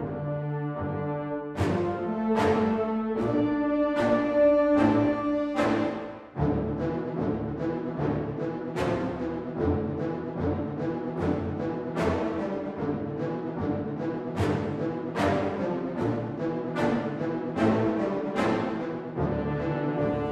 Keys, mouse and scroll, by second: 0.2 Tab, 1.1 click, 1.8 middle click, 2.2 scroll down 3, 6.1 ctrl+r, 7.7 click, 8.3 alt+click, 9.0 middle click, 9.6 scroll down 1, 10.4 middle click, 10.4 scroll down 1, 11.7 shift+click, 12.5 x, 13.4 middle click, 13.8 scroll up 3, 14.0 Tab, 15.0 click, 18.9-19.3 scroll down 7, 19.4 middle click.